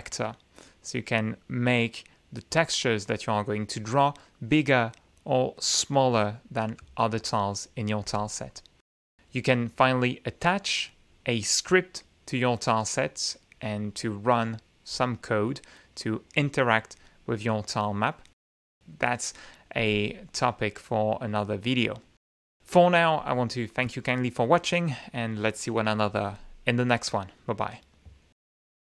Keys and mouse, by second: 1.3 click, 6.8 click, 11.5 click, 17.7-19.1 middle drag.